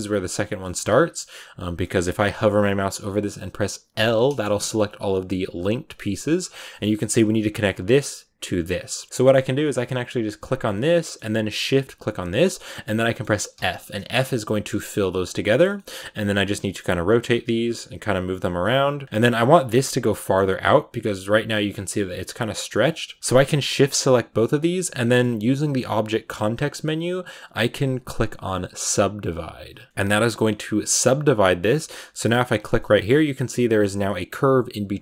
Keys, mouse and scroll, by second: 0.0 g, 0.5 middle click, 0.8 a, 0.8 scroll down 2, 1.1 middle click, 1.7 scroll up 1, 1.7-3.8 middle drag, 3.8 l, 4.1 middle click, 4.4 g, 6.0-7.3 middle drag, 7.3 right click, 8.5 shift+right click, 8.8 middle click, 9.0 a, 10.3 right click, 10.5 scroll up 1, 10.6-12.0 middle drag, 12.0 shift+right click, 12.4-13.4 middle drag, 13.4 f, 13.7 middle click, 14.0-15.1 scroll down 1, 15.1 scroll down 1, 15.2 right click, 15.5 shift+middle click, 16.0 r, 16.4 g, 16.9 middle click, 17.1 r, 17.7 click, 18.1 right click, 18.3 g, 19.0 right click, 19.1 g, 19.6 middle click, 20.4 right click, 20.6 g, 22.3 g, 23.2 g, 24.8-29.0 middle drag, 32.4 right click, 32.6 middle click, 33.0 g, 34.1 right click.